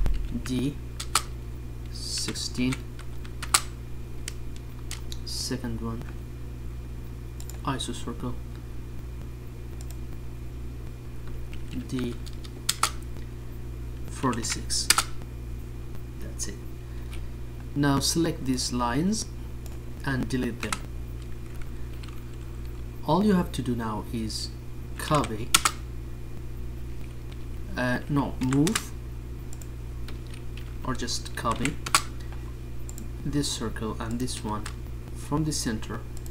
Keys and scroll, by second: 27.6 d.